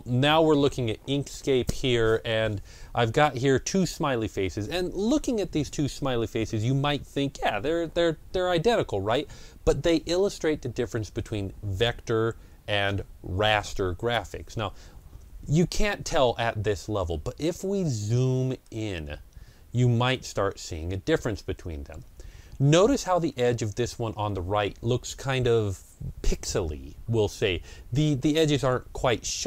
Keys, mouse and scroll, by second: 17.9 ctrl+scroll up 1, 18.5 ctrl+scroll up 1, 19.6 scroll down 1.